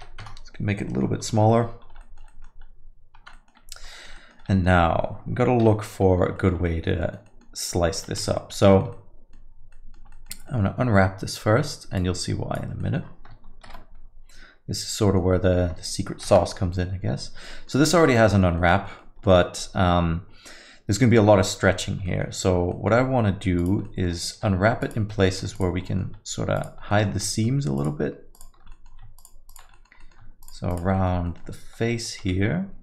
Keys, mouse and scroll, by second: 0.9 alt+middle click, 1.2-2.0 scroll up 4, 1.5 alt+middle click, 2.0 alt+middle click, 2.3 middle click, 2.7-3.2 scroll up 2, 3.2 Tab, 3.3 alt+middle click, 3.7 scroll down 2, 3.9 alt+middle click, 4.1 middle click, 4.5 alt+middle click, 5.6 KP_Divide, 6.3 alt+middle click, 6.6 middle click, 7.0 alt+middle click, 7.2 middle click, 8.0 middle click, 8.1 alt+middle click, 8.2 Tab, 8.3 alt+middle click, 8.6 middle click, 8.9 alt+middle click, 9.7 alt+middle click, 10.1 middle click, 10.4 alt+middle click, 11.9 click, 12.8 middle click, 13.6 shift+F10, 14.4 scroll up 4, 14.9 middle click, 16.2 shift+F10, 17.1 scroll up 1, 17.5 middle click, 17.8 alt+middle click, 18.0 middle click, 18.3 alt+middle click, 18.6 middle click, 19.0 alt+middle click, 21.6 alt+middle click, 22.0 alt+middle click, 22.4 scroll up 2, 22.7 alt+middle click, 23.6 click, 23.8 alt+middle click, 24.3 2, 24.8 alt+click, 25.7 click, 25.8 alt+middle click, 26.5 shift+click, 27.7 shift+click, 28.3 shift+click, 28.7 alt+middle click, 29.2 shift+click, 29.5 shift+click, 29.7 alt+middle click, 30.0 middle click, 30.4 shift+click, 30.7 shift+click, 30.9 alt+middle click, 31.2 middle click.